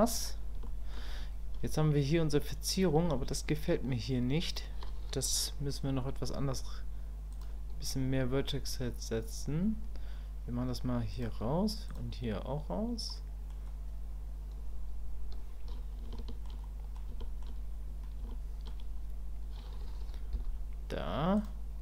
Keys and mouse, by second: 0.7 shift+middle click, 7.4 click, 11.1 click, 11.9 click, 13.1 middle click, 16.1 shift+middle click, 16.6 middle click, 17.2 shift+middle click, 18.3 shift+click.